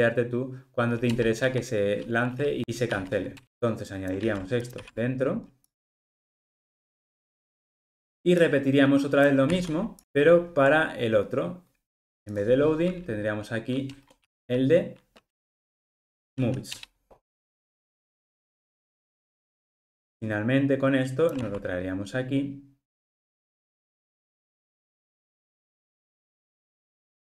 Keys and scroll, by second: 1.2 Return, 4.2 super+x, 9.5 super+c, 15.4 ctrl+space, 21.3 super+c.